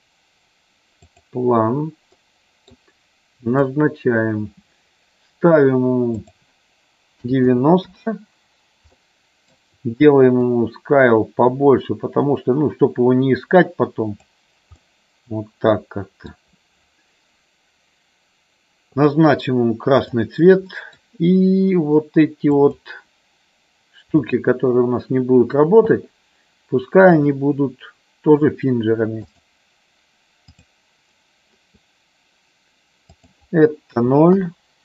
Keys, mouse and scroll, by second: 2.2 middle click, 3.5 click, 6.1-8.4 drag, 9.0 middle click, 10.5-14.4 drag, 14.9-16.3 middle drag, 19.9 click, 20.8 middle click, 22.4-23.8 drag, 24.1-25.3 shift+drag, 27.0-29.4 drag, 30.4 click, 33.1-34.8 drag.